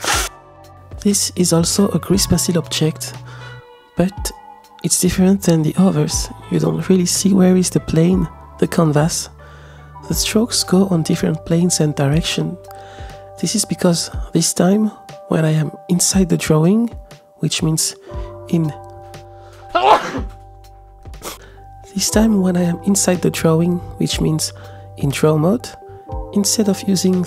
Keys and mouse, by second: 4.2-5.3 middle drag, 4.2 space, 6.7-7.6 shift+middle drag, 6.7 shift+s, 8.1-10.9 middle drag, 11.6 g, 14.4-15.8 middle drag, 16.4 ctrl+Tab, 21.6 middle click, 22.3 ctrl+Tab, 26.0-27.2 middle drag.